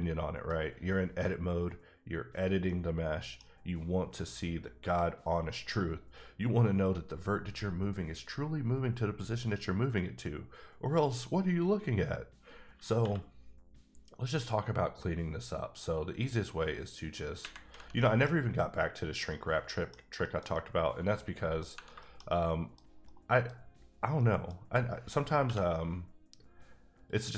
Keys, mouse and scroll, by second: 2.6 middle click, 15.1 k, 16.1 click, 18.0 middle click, 19.3 middle click, 20.1 shift+middle click, 20.6 middle click, 22.0 shift+middle click, 23.0 scroll down 1, 23.0 middle click, 23.7-24.1 scroll up 2, 24.1 middle click, 24.5 scroll down 1, 26.3 k, 27.0 click.